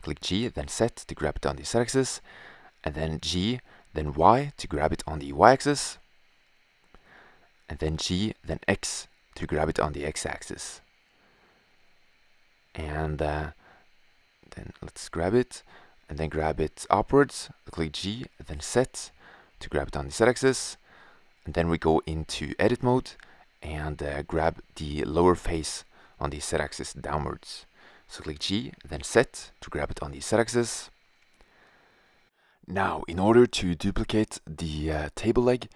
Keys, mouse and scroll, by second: 0.1 g, 2.9 g, 7.1 g, 12.9 g, 15.8 s, 17.0 drag, 18.8 g, 26.3 right click, 27.9 g, 34.1 g.